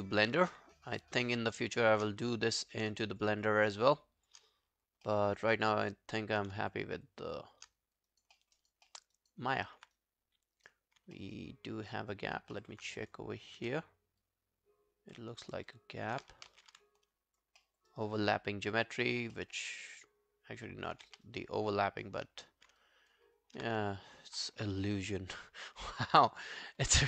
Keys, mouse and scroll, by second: 1.3 shift+click, 2.2 shift+click, 2.2 alt+click, 2.6 alt+right click, 3.2 shift+click, 3.4 shift+click, 4.5 alt+click, 5.1 alt+middle click, 5.3 alt+right click, 5.5 alt+click, 6.7 shift+click, 7.0 shift+click, 7.8 alt+click, 8.1 alt+right click, 8.4 alt+middle click, 8.6 alt+right click, 8.9 alt+middle click, 9.2 alt+right click, 9.5 alt+scroll down 1, 10.0 right click, 11.0 right click, 11.2 alt+middle click, 11.4 alt+right click, 12.6 alt+middle click, 13.4 scroll down 2, 15.2 w, 15.5 alt+right click, 15.7 alt+click, 16.5 ctrl+z, 17.0 alt+click, 17.6 alt+middle click, 17.9 alt+right click, 18.2 alt+click, 19.4 alt+middle click, 19.7 alt+scroll down 1, 19.9 alt+click, 21.1 q, 21.3 right click, 22.8 alt+click, 23.9 ctrl+click, 24.1 ctrl+click, 24.4 scroll down 1, 24.7 alt+click, 26.9 alt+middle click.